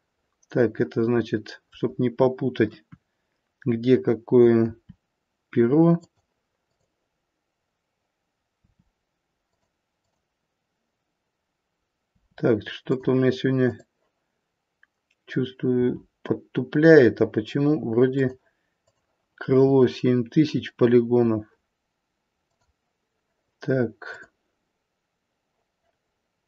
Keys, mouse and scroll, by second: 0.0 middle click, 0.2 middle click, 0.8 middle click, 2.7 KP_1, 4.5 r, 6.6 click, 8.6 r, 9.9 click, 12.0 r, 13.6 click, 15.7 r, 18.7 click, 20.4 r, 24.1 click.